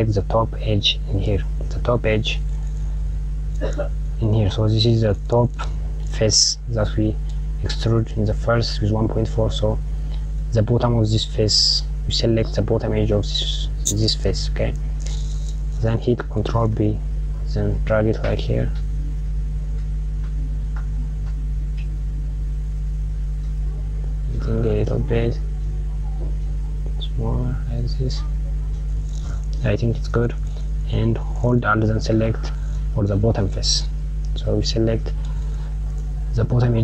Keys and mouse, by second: 0.0 click, 1.8 click, 16.1 ctrl+b, 32.9 click, 34.6 click.